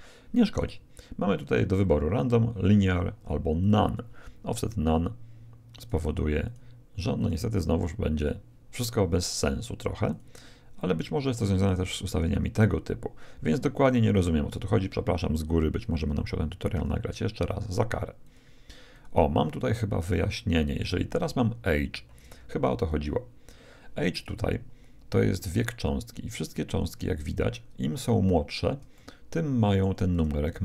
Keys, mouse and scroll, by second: 0.5-2.3 drag, 5.7-8.8 drag, 10.1-11.7 drag, 16.7-20.8 drag, 26.7-27.9 scroll up 1, 27.9-28.9 scroll up 1, 28.9-30.6 middle drag.